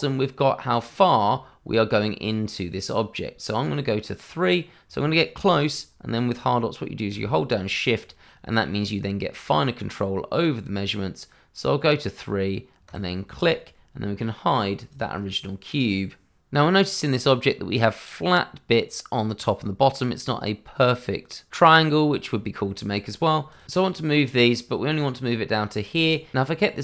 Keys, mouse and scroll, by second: 12.8 click, 15.7 middle click, 22.3-22.7 scroll up 1, 22.7 middle click, 23.5 click, 24.8 middle click, 26.4 Tab.